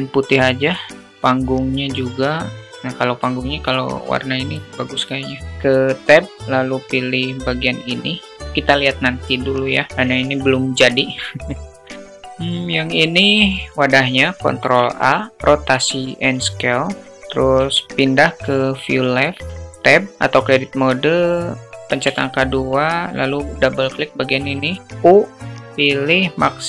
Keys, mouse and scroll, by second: 1.2 click, 1.9 click, 5.4 Tab, 6.6 click, 10.5 click, 14.0 ctrl+a, 17.0 `, 19.5 alt+shift+Tab, 19.5 alt+shift+middle click, 21.7 2, 24.6 u.